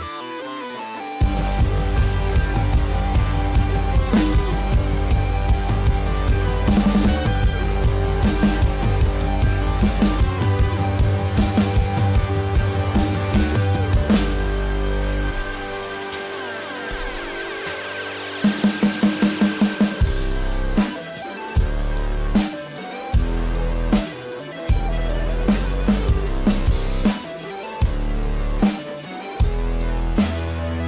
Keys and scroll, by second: 1.0 ctrl+-, 19.2 ctrl+-, 19.9 ctrl+=, 20.6 space.